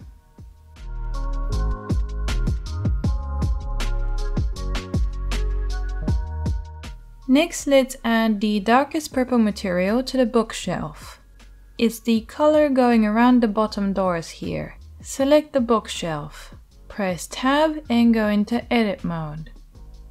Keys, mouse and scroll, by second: 6.7-13.6 middle drag, 9.8 /, 10.0-20.1 drag, 10.0-13.6 right drag, 12.7 Tab, 16.2 Tab.